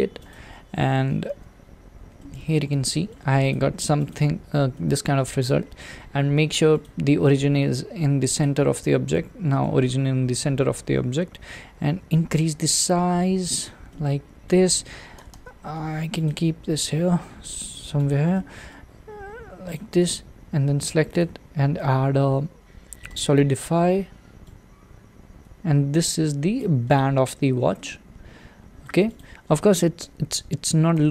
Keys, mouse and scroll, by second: 0.3 click, 1.3 alt+z, 1.6-2.2 scroll down 3, 2.2-3.5 middle drag, 3.5 click, 4.1 click, 4.8-8.4 middle drag, 8.4 click, 9.2-10.1 middle drag, 10.1-10.5 scroll up 1, 12.0 s, 13.9-15.2 middle drag, 15.2 g, 16.5 s, 18.1 click, 18.3-19.2 middle drag, 19.2 s, 20.0 click, 23.1-26.9 drag, 27.4-27.7 scroll down 1, 27.7-29.2 middle drag, 29.2 click, 30.0 Tab, 30.9 a.